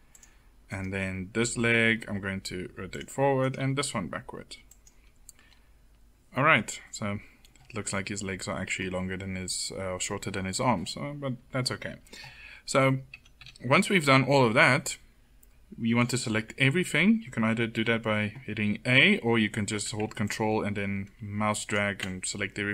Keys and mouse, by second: 1.8 r, 3.5 r, 5.1 middle click, 13.1 a, 13.3 a, 14.0 middle click, 17.5 a, 17.7 a, 20.2 ctrl+click.